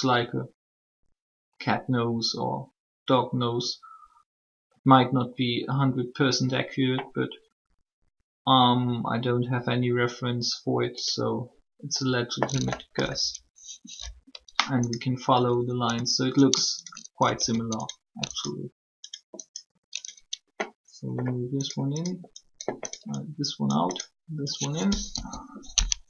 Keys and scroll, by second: 24.9 1.